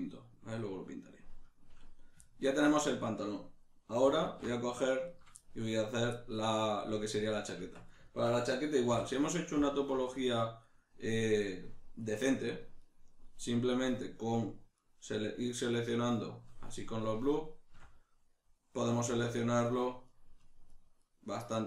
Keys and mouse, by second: 4.2 alt+q, 5.1 right click, 5.4-9.7 shift+middle drag, 7.6 Tab, 8.9 3, 9.7 alt+right click, 10.0 alt+shift+right click, 10.3 alt+shift+right click, 10.6 alt+shift+right click, 12.8 alt+shift+right click, 14.7 alt+shift+right click, 15.8 alt+shift+right click, 19.4 alt+shift+right click, 19.7 alt+shift+right click, 20.1 alt+shift+right click, 20.4 alt+shift+right click, 20.7 alt+shift+right click, 21.0 alt+shift+right click, 21.3 alt+shift+right click.